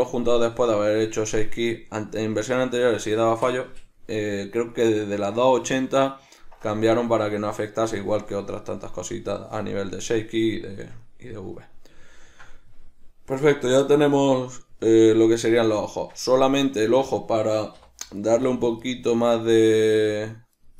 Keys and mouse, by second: 0.5-1.8 drag, 1.8-16.3 middle drag, 16.1 Tab, 18.3 right click, 18.6 right click, 18.9 right click, 19.2 right click, 19.5 right click, 19.8 right click, 20.1 right click, 20.7 right click.